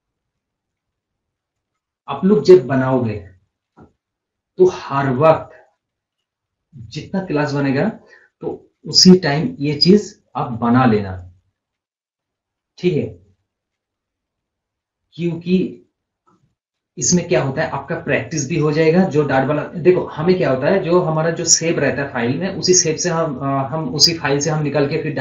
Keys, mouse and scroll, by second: 1.0 scroll up 1, 1.2 scroll down 1, 9.2-12.0 drag, 12.0 scroll up 1, 12.2 scroll down 1.